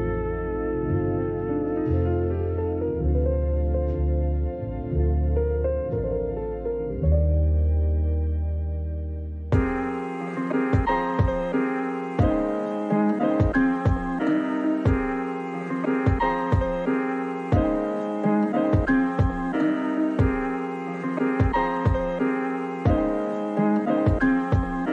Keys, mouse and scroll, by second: 0.8-1.5 scroll up 2, 1.5-2.6 drag, 3.0 Tab, 3.1-3.5 scroll up 1, 3.5 Tab, 3.6 scroll down 5, 3.9 click, 4.1 click, 5.4 middle click, 7.6 click, 8.2-9.5 drag, 9.8 Tab, 10.2-11.2 right drag, 11.2 s, 13.2 click, 14.0 s, 15.5 click, 16.6 Tab, 17.3 click, 18.5 click, 19.1 click, 19.2 Tab, 19.5 ctrl+r, 20.7 alt+click, 21.4 middle click, 21.8 alt+shift+click, 22.1 alt+shift+click, 22.2 middle click, 22.5 s, 22.8 click, 23.9-24.9 drag.